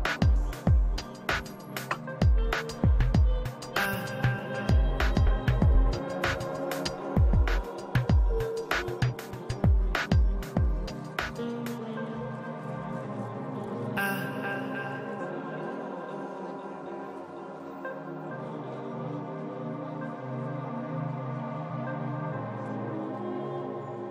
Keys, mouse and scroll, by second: 0.1 ctrl+z, 0.2 ctrl+z, 0.3 ctrl+z, 0.4 ctrl+z, 1.7-3.3 drag, 4.2-6.7 middle drag, 4.4-9.1 drag, 7.0-8.5 middle drag, 8.6-12.5 middle drag, 9.7 f, 9.9-13.1 drag, 13.8-24.1 middle drag, 15.3 f, 15.5-19.1 drag, 19.2 click, 22.7 shift+c, 22.8 f, 23.6 f, 23.9 f.